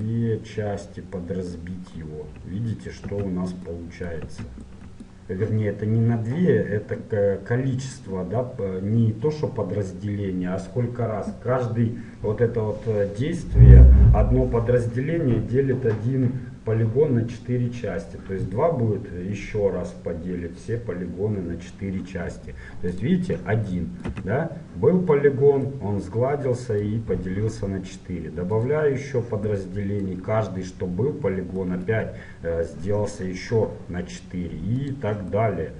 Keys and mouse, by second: 0.1-3.1 middle drag, 3.1 z, 4.3 z, 22.9-24.7 drag, 24.2 z, 28.7-29.9 drag, 29.7 middle click, 34.9 click, 35.4-35.7 middle drag.